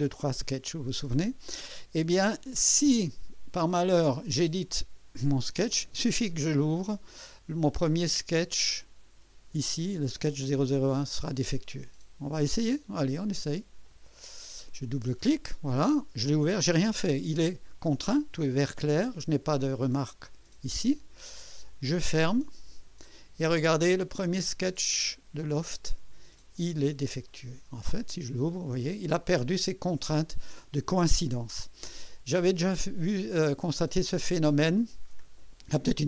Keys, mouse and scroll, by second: 4.2 click, 8.8-9.7 drag, 12.3-13.2 scroll up 2, 13.8 click, 21.6 click, 27.8 click, 29.1 scroll down 2, 29.5-30.4 right drag, 33.5 click.